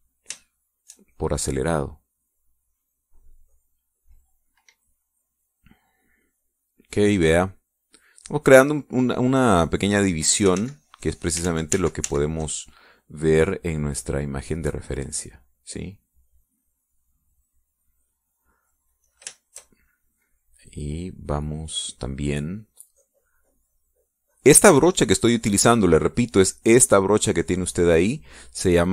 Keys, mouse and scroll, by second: 1.5 shift+click, 2.9-5.3 drag, 6.6-10.3 drag, 11.7 ctrl+z, 12.4 ctrl+click, 12.6 ctrl+z, 15.0-19.7 drag, 20.2-26.9 shift+drag.